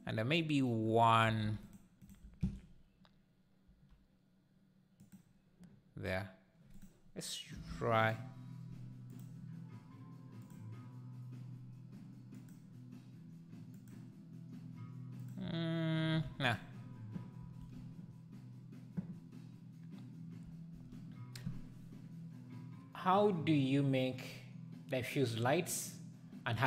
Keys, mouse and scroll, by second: 0.0 click, 1.5 shift+d, 2.0 shift+right click, 2.2 shift+s, 3.7 g, 8.0 click, 10.4 click, 16.6 x.